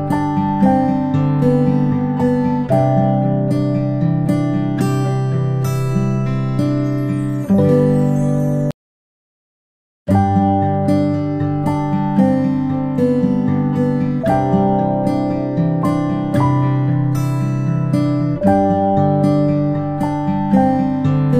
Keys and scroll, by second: 0.0-0.4 space, 4.4 space, 4.7 space, 6.3 space, 8.4 space, 8.6 space, 12.4 space, 16.2 space, 16.4 space, 19.2 space, 19.6 space, 20.6-21.3 ctrl+z.